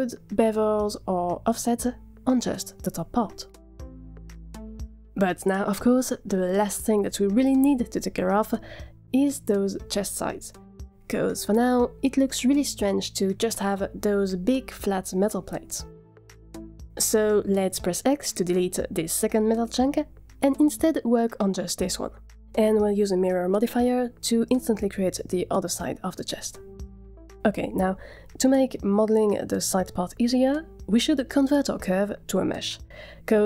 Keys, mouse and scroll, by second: 0.3 click, 1.4 click, 2.3 scroll down 5, 3.0 drag, 3.5 scroll down 2, 5.1-5.5 middle drag, 5.8 click, 6.7-17.4 middle drag, 17.6-18.1 middle drag, 18.4 click, 19.0 x, 21.1-21.7 middle drag, 22.1 click, 27.8 middle click, 28.1-28.9 scroll up 1, 28.9-29.4 scroll down 1, 31.4 middle click, 32.0 click.